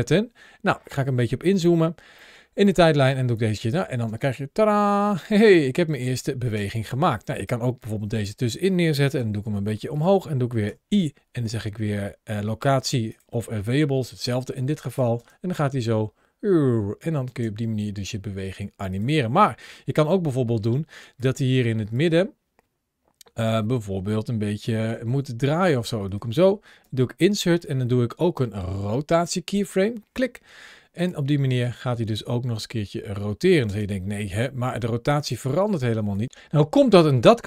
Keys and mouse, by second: 0.8 middle click, 2.1 middle click, 3.1-3.5 drag, 3.8 space, 6.4 space, 7.2-8.0 drag, 9.0 g, 9.7 click, 14.3-14.8 drag, 15.0 space, 17.1 space, 18.8 click, 21.0 click, 24.6 r, 24.7 r, 25.8 click, 26.6 i, 30.8 click, 31.3 space, 33.4 space, 35.0 click, 35.9 click.